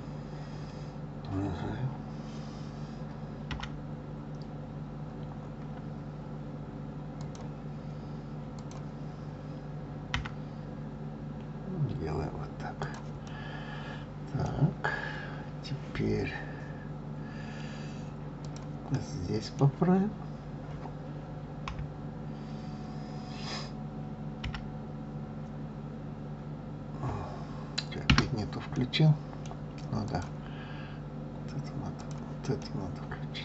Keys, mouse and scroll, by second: 8.5 click, 10.1 g, 13.2-14.5 middle drag, 14.5 scroll down 4, 15.0-15.9 scroll up 1, 15.9-18.1 scroll up 1, 18.4 click, 18.8-21.6 middle drag, 21.6 KP_3, 24.4 g, 28.7-30.0 middle drag, 30.0 click, 31.9 click, 32.6-33.4 middle drag.